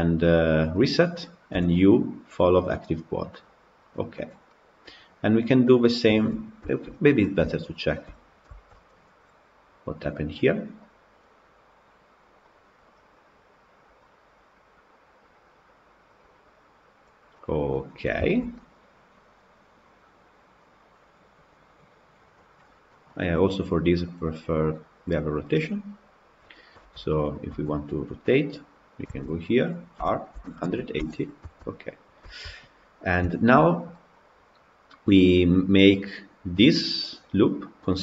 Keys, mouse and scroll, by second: 3.7 u, 4.3-6.9 middle drag, 6.9-7.3 scroll up 6, 7.3-8.5 shift+middle drag, 8.5 Tab, 8.6 click, 17.2-21.4 middle drag, 22.3 scroll down 4, 22.7-24.2 scroll up 2, 22.7 middle drag, 24.2-24.6 scroll up 1, 24.6 click, 26.3 click, 26.6 Tab, 27.1 click, 27.5 Tab, 28.9 a, 30.0 r, 31.4 Tab, 32.1-32.5 shift+middle drag, 32.5-33.1 scroll up 1, 33.1-38.0 shift+middle drag.